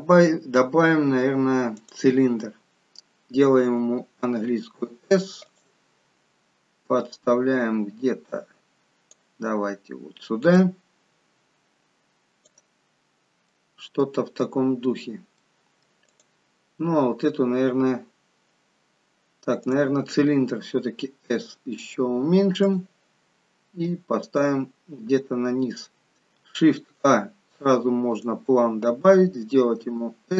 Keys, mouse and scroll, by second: 6.9 click, 10.5 click, 15.0-15.4 scroll down 1, 15.4 middle click, 16.1 click, 21.2 s, 23.8 click.